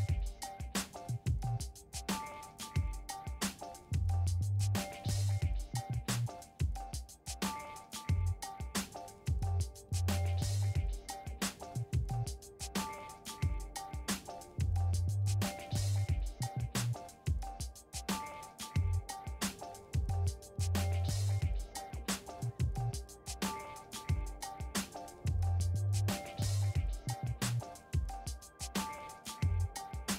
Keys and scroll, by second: 9.9 5, 12.9-13.9 typing, 14.3 Return, 19.8 v, 28.6-29.7 typing, 30.0 Return.